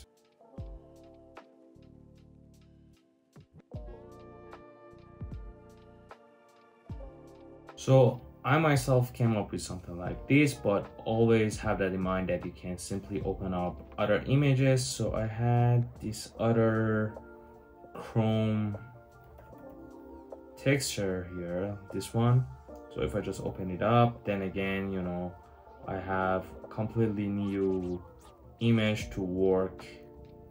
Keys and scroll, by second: 2.7 super+z, 3.0 Return, 3.0 1, 7.3 super+z, 7.7 Return, 7.7 typing, 18.8-19.6 typing, 27.5-30.0 typing, 29.2 Tab.